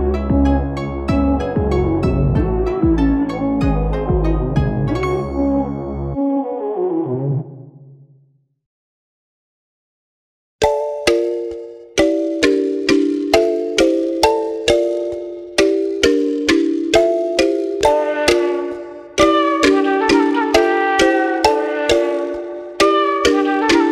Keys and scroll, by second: 0.0-0.5 typing, 14.8-15.8 typing, 17.0 typing, 17.3 Return, 18.9-21.3 typing, 22.1 Return.